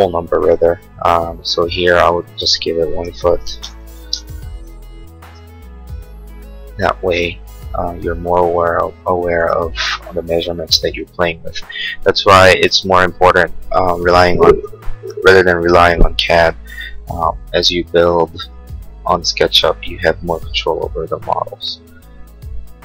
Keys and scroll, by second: 3.4 ', 3.7 Return, 4.0 space.